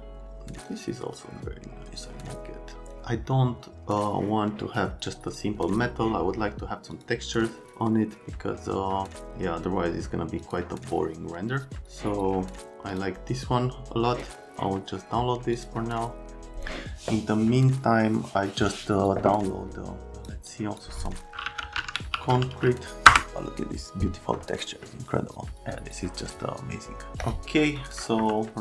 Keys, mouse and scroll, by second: 28.2 F3.